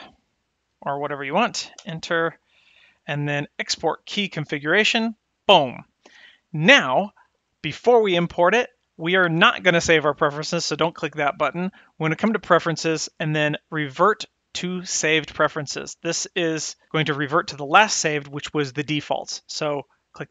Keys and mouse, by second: 12.0-20.3 drag.